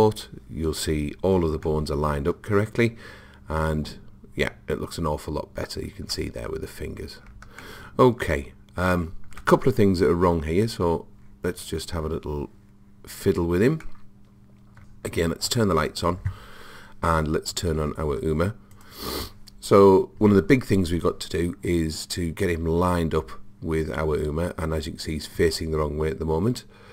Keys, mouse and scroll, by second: 0.0 click, 1.7-3.5 middle drag, 7.6-9.6 middle drag, 10.4-13.8 middle drag, 13.9-15.5 middle drag, 15.8 click, 18.8 click.